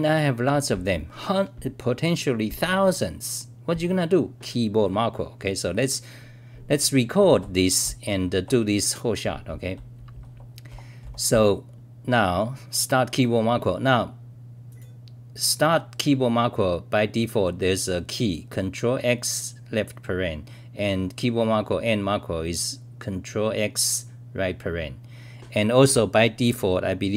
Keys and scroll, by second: 0.0-1.6 typing, 4.2 scroll up 3, 4.8-5.9 scroll up 21, 7.7 scroll up 3, 7.8-11.8 typing.